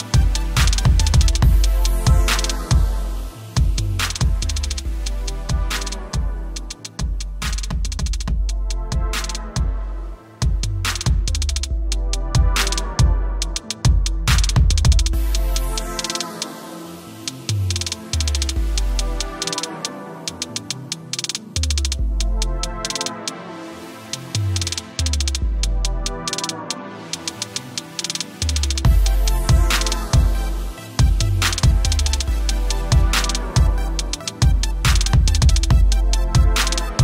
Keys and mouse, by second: 0.3 t, 2.0 alt+shift+click, 3.3 click, 4.1 Return, 4.9 ctrl+space, 5.0 =, 5.9 click, 6.9 ctrl+u, 8.0 click, 22.1 click, 29.2 space, 29.3 click, 29.4 space, 29.6 =, 31.8 click, 34.9 click, 35.5 space, 35.8 click, 35.8 space, 36.8 click.